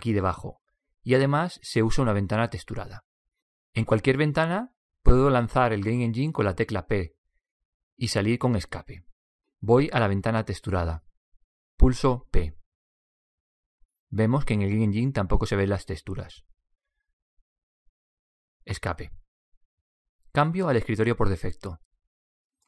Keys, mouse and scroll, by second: 9.7 p, 18.4 Escape.